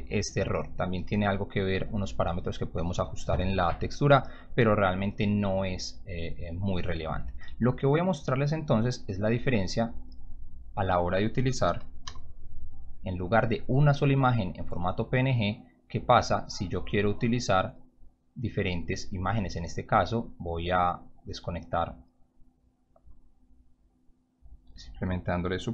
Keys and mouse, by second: 0.9 click, 9.2-9.5 drag, 10.4 click, 12.0 m, 13.6-14.2 drag, 16.0 click, 18.6-19.1 drag, 20.3-21.2 drag, 22.1-22.5 drag, 23.6-24.0 drag, 24.4 click.